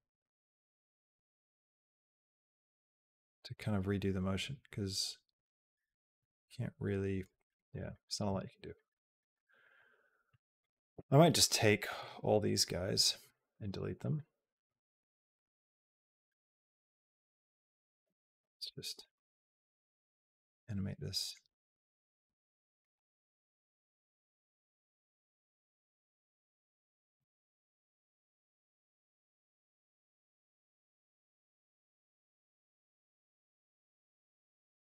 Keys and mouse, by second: 0.0-7.0 drag, 7.2 middle click, 7.7 middle click, 8.1 a, 8.6 middle click, 9.1 middle click, 9.5 middle click, 10.4 click, 11.0 b, 13.0 x, 13.8 middle click, 14.5-17.5 drag, 18.8 g, 22.1 g, 22.7 g, 25.9 g, 26.9 g, 29.3 g, 31.5 click, 32.1 r.